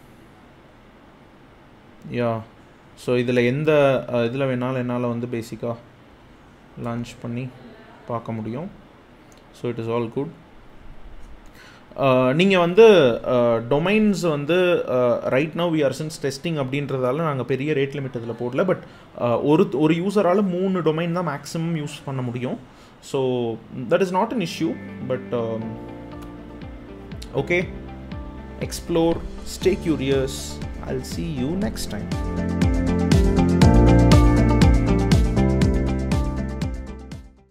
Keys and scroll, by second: 3.1 super+c, 5.8 super+v, 6.5 Return.